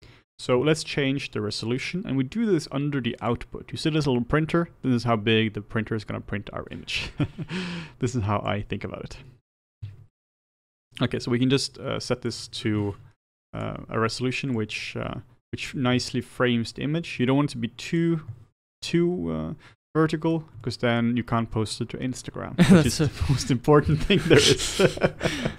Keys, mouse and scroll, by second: 8.5-18.9 drag, 18.9-19.7 scroll up 2, 19.7-25.5 shift+middle drag.